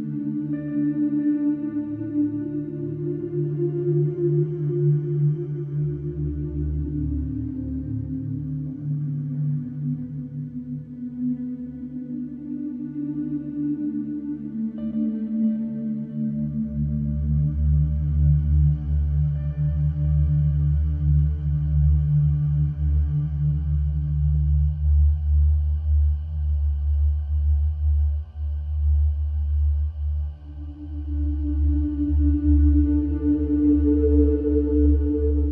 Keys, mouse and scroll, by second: 0.4-1.4 scroll, 2.6 click, 2.8 click, 3.5 middle click, 3.9 middle click, 4.0 middle click, 6.5 click, 7.4 click, 10.0 middle click, 11.3 click, 12.0 click, 13.8-14.2 scroll, 18.0-18.5 scroll, 18.6-19.1 scroll, 19.2 click, 20.7-21.8 drag, 22.9 ctrl+8, 25.2 Escape, 27.6-28.7 drag, 28.9-30.0 drag, 31.2-32.3 drag, 33.0-34.9 drag, 33.8 Escape, 35.3-35.5 drag.